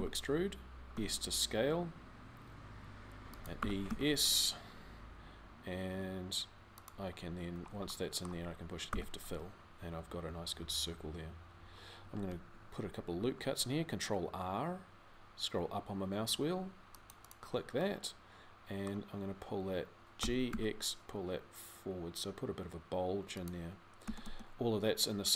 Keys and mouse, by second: 3.4 e, 7.3 middle click, 7.8 middle click, 10.6 f, 13.1 ctrl+r, 17.8 middle click, 18.2 middle click, 18.4-19.9 middle drag, 19.9 g, 23.8 a, 24.0 a.